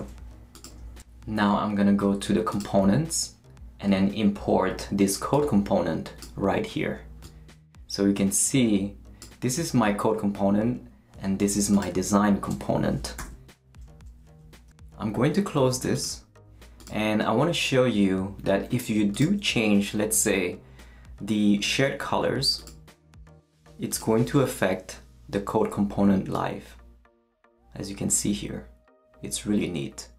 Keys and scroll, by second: 13.2 super+-.